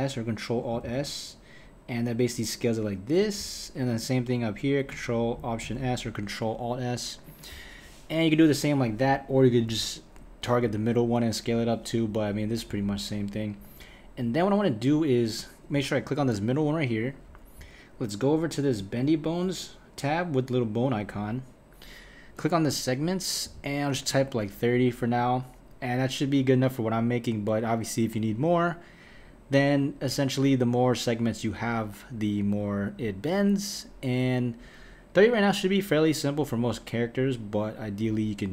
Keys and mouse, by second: 0.8 ctrl+alt+s, 3.9 click, 5.6 ctrl+alt+s, 9.4 click, 11.0 click, 12.7 KP_1, 16.5 click, 18.8-25.2 drag.